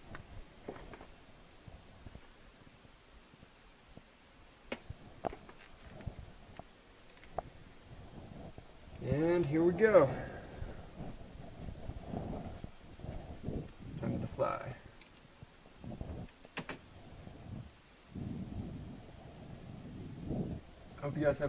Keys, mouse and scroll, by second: 5.5 click, 15.0 click, 16.5 space.